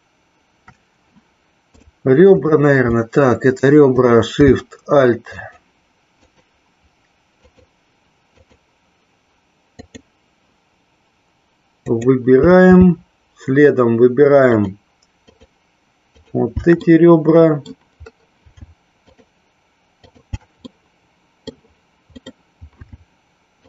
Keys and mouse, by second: 2.6 click, 5.6 alt+shift+click, 6.4 alt+shift+click, 7.7 alt+shift+click, 8.5 alt+shift+click, 10.0 alt+shift+click, 16.2 alt+shift+click, 17.0 middle click, 19.2 alt+shift+click, 20.1 alt+shift+click, 20.9 middle click.